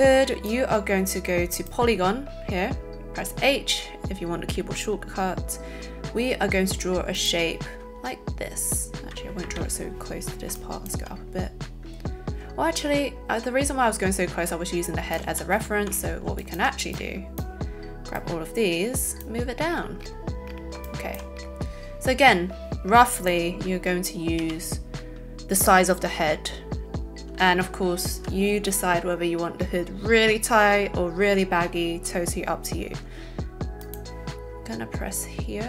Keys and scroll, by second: 9.4 Escape, 15.2 alt+a, 16.2 alt+a, 24.4 h.